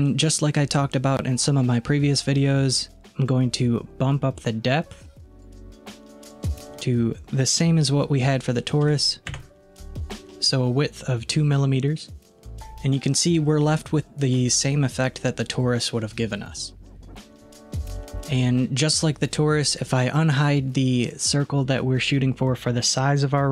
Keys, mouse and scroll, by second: 3.7-9.4 drag, 13.4-16.6 middle drag, 21.0 click.